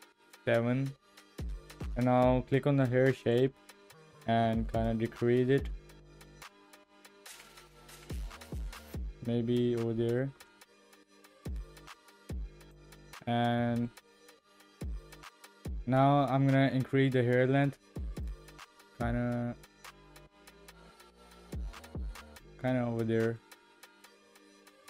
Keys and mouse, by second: 3.2 click, 4.7-10.2 shift+drag, 10.2 shift+middle click, 12.7 middle click, 12.7 click, 13.8-14.3 shift+middle drag, 14.6 shift+middle click, 18.2-22.5 drag, 23.4 click.